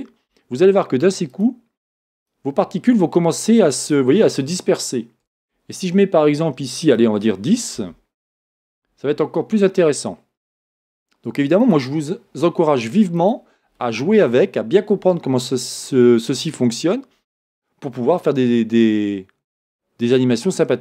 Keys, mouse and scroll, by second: 8.5 Return, 8.5-18.6 drag, 20.0-20.8 drag.